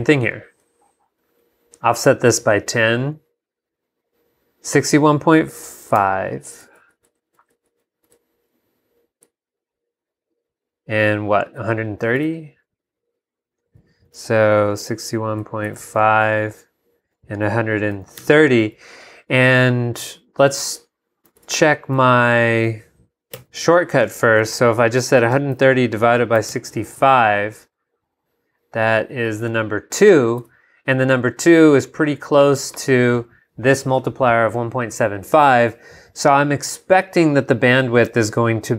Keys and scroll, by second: 0.0 super+Down, 6.0 super+y, 6.5 super+Up, 12.2 super+Tab, 14.8 6, 15.7 5, 17.9 |, 18.2 0, 21.4 super+Tab, 23.4 y, 24.4 super+y, 25.1 super+i, 25.2 3, 26.0 /, 26.4 6, 29.3 ↺.